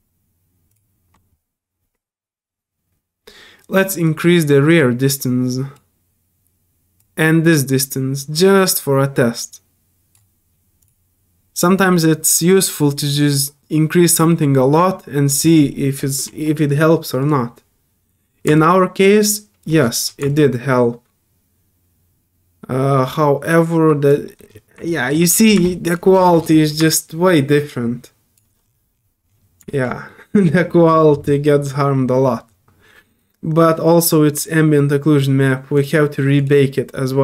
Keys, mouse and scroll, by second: 0.7 alt+click, 4.0-5.7 drag, 7.0-10.1 drag, 10.8 click, 17.2 click, 18.5-19.6 alt+drag, 20.3-24.1 alt+drag, 24.2 alt+middle click, 24.9 alt+click, 25.3 alt+middle click, 25.6 alt+click, 26.1 alt+scroll down 4, 26.8-28.3 alt+drag, 28.5 alt+scroll down 2, 28.6 alt+scroll up 4, 29.3 click, 30.1 alt+middle click, 35.7 click, 36.4 click.